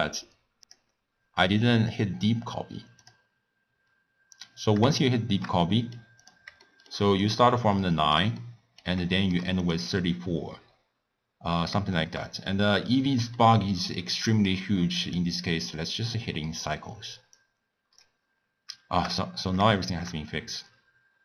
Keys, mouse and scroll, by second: 0.2-3.9 drag, 5.0-6.2 shift+middle drag, 6.2 click, 6.6-7.2 shift+middle drag, 7.2 click, 7.9-9.6 shift+middle drag, 9.6 click, 9.9-15.0 middle drag, 15.0-18.3 drag, 18.3-18.9 scroll up 1, 18.9 shift+scroll up 2, 19.0-19.7 scroll down 2, 19.7-21.2 shift+middle drag.